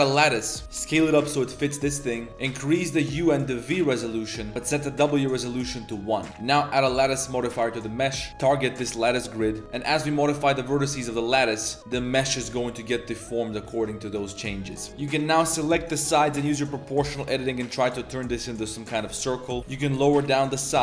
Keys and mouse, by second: 0.6 s, 0.6 x, 1.5 click, 2.6 click, 3.2-4.2 drag, 4.8 click, 6.1 click, 6.3 ctrl+s, 9.9 click, 10.2 shift+click, 10.4 g, 10.9 ctrl+z, 11.1 ctrl+z, 12.0 a, 12.1 a, 12.2 b, 12.4 g, 13.8 click, 14.1 g, 16.0 click, 16.5 s, 19.1 Tab, 19.3 drag, 19.6 g.